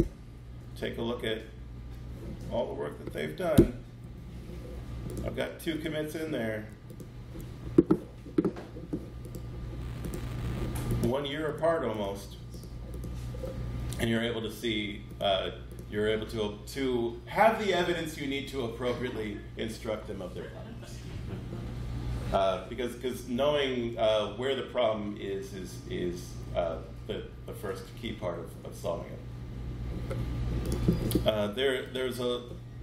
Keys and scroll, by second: 3.4 super+Return.